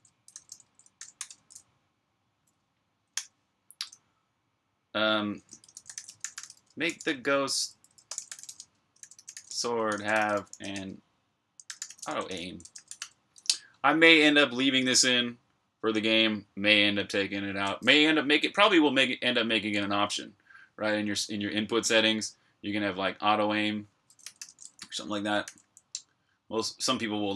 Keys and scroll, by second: 0.2-1.1 typing, 3.0 i, 5.2-12.0 typing, 14.8 typing, 24.1 v, 25.3 j.